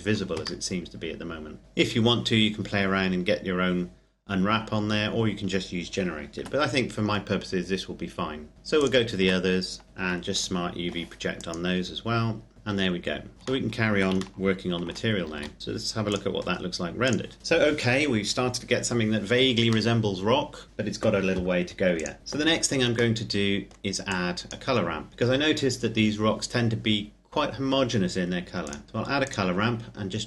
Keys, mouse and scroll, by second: 1.6 Tab, 3.2-4.5 scroll down 1, 4.5-6.2 scroll up 1, 6.2 Tab, 8.5 right click, 8.9 Tab, 9.8 u, 10.1 click, 12.5 Tab, 13.1 click, 13.3-13.8 shift+scroll down 1, 14.2 shift+middle click, 15.1 ctrl+s, 15.4 ctrl+click, 18.6-19.6 scroll down 1, 19.6 middle click, 21.6 click, 22.1 scroll down 1, 22.2 middle click, 23.8 click, 28.3 click.